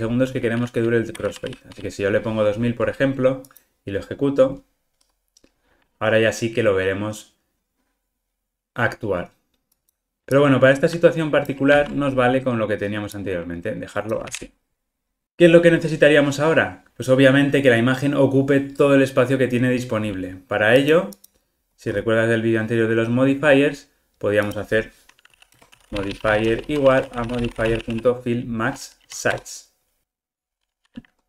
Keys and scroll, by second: 4.5 ctrl+r, 11.7 super+c, 14.2 super+v, 29.3 Return, 30.0 ctrl+r.